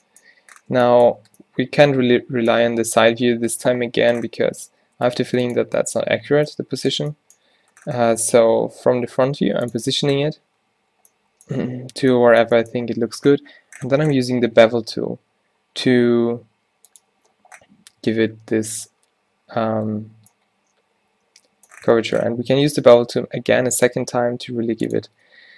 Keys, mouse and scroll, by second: 1.3 n, 4.5 r, 5.3 r, 6.4 z, 7.9 z, 8.4 s, 10.6 z, 11.9 z, 14.6 ctrl+b, 18.0 q, 19.4 ctrl+z, 20.2 Tab, 21.9 Tab, 23.0 ctrl+b, 25.1 Tab.